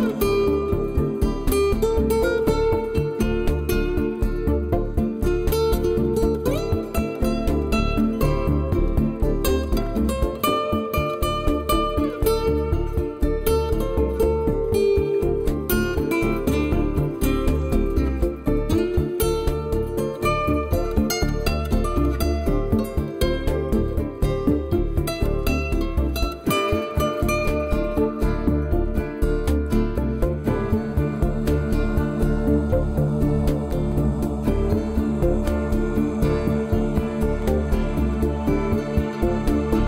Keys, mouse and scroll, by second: 2.2 Tab, 2.4 middle click, 3.0 shift+middle click, 3.4 scroll up 3, 4.2 scroll down 1, 4.7 w, 6.2 KP_1, 6.4 scroll down 4, 7.0 shift+middle click, 7.4 a, 7.7 a, 7.9 b, 9.6 click, 10.0 click, 10.4 click, 10.9 a, 11.2 b, 12.7 click, 12.9 b, 14.6 scroll up 5, 14.9 shift+middle click, 15.2 middle click, 16.9 KP_1, 17.2 scroll down 3, 18.4 b, 20.7 scroll up 3, 21.1 middle click, 22.7 middle click, 23.5 middle click, 24.9 scroll down 4, 25.2 middle click, 25.7 w, 27.4 Tab, 27.8 middle click, 30.4 scroll up 5, 31.2 scroll down 2, 32.0 Tab, 32.2 scroll down 2, 33.1 a, 33.4 middle click, 38.3 ctrl+z, 38.6 ctrl+z, 38.9 ctrl+z, 39.6 Tab.